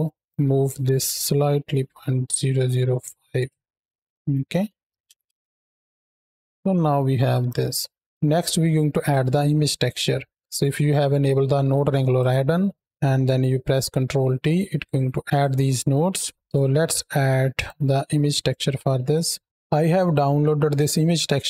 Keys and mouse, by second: 0.2-2.6 drag, 1.1 KP_0, 4.0 middle drag, 4.9 shift+Left, 5.1 space, 6.3 middle click, 7.2 KP_7, 7.7 space, 8.2 ctrl+z, 8.2 click, 12.0 click, 14.1 ctrl+t, 15.9 middle click, 17.4 click.